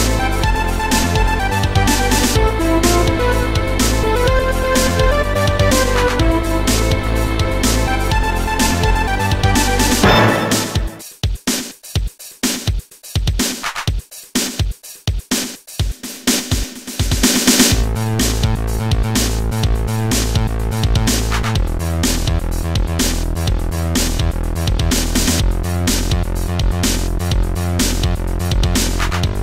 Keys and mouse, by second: 4.1 click, 4.2 click, 4.7 click, 5.9 click, 6.7 click, 7.1 shift+click, 8.7 click, 9.7 click, 10.9 click, 12.8 click, 15.0 click, 18.5 click, 19.3 shift+click, 20.8 click, 22.7 click, 25.4 click, 26.4 click.